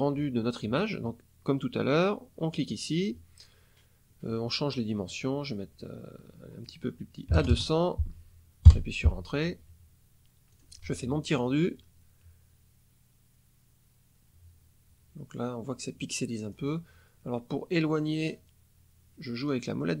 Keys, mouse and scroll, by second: 2.4 click, 5.0-6.8 drag, 7.3 KP_2, 7.4 KP_0, 8.6 KP_Enter, 10.4 click, 16.2 scroll down 2, 18.0 scroll down 2, 19.3 scroll down 2.